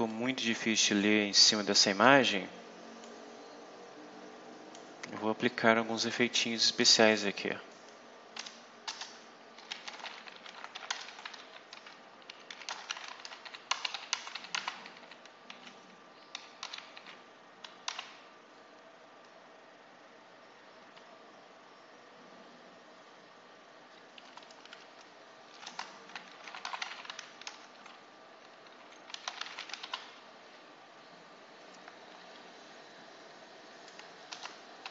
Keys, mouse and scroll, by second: 0.0-1.1 drag, 1.3 click, 2.9-4.8 drag, 5.2-5.5 scroll down 2, 7.0 click, 8.3-15.3 typing, 8.7 Return, 16.5 6, 16.9 shift+0, 17.8 ;, 25.5 Return, 26.0-27.6 typing, 28.7-30.2 typing, 34.2 Return, 34.5-34.9 typing.